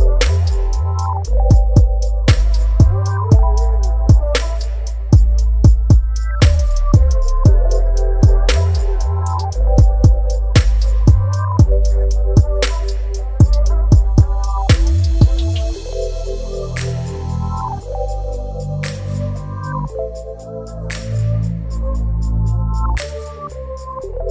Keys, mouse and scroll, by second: 5.3-13.0 alt+drag, 12.9 right click, 13.0 right click, 14.0 click, 17.2 click.